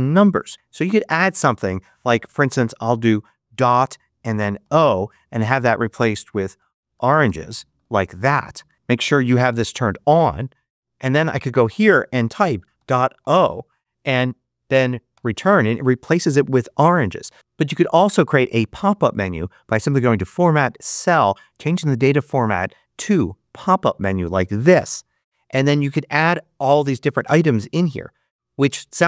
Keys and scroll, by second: 12.6-13.1 typing, 15.0 Return.